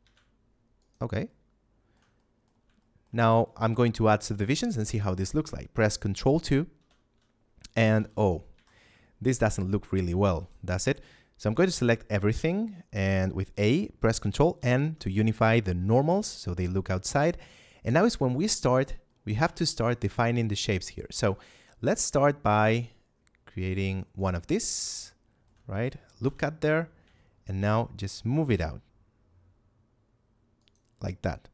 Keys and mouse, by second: 0.7 shift+click, 1.2 shift+middle click, 2.1 middle click, 2.7 shift+middle click, 3.1 middle click, 6.7 ctrl+2, 7.9 a, 8.5 z, 8.9 shift+middle click, 10.3 a, 14.5 ctrl+n, 15.7 a, 17.0 shift+middle click, 18.5 shift+middle click, 19.5 shift+middle click, 21.0 ctrl+r, 23.8 click, 24.1 right click, 24.8 shift+middle click, 26.1 KP_7, 26.9 z, 27.5 g, 30.5 shift+click, 31.0 shift+middle click.